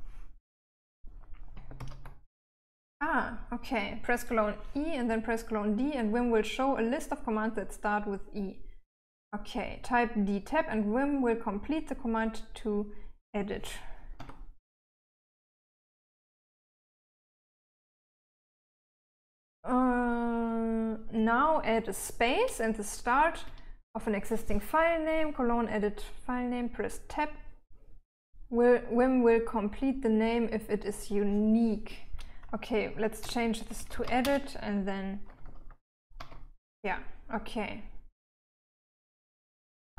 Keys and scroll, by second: 2.1 ctrl+d, 14.5 Tab, 23.6 space, 32.7-36.6 typing, 36.5 Tab.